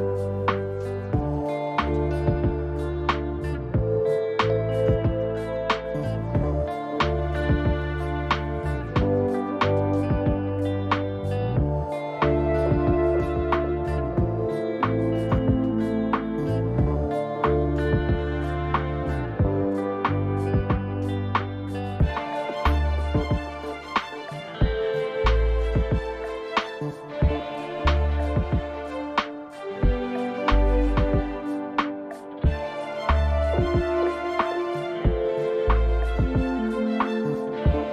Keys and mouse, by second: 1.0 click, 3.0 g, 8.1 click, 9.5 g, 15.4 click, 16.3 g, 21.0 a, 22.6 ctrl+b, 32.1 ctrl+r, 33.8 Tab, 35.1 ctrl+r, 36.5 click, 37.8 middle drag.